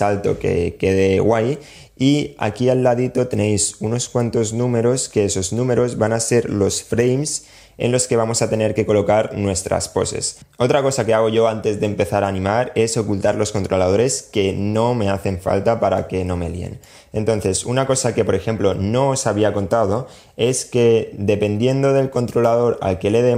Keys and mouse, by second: 15.1-16.1 middle drag, 21.4 click.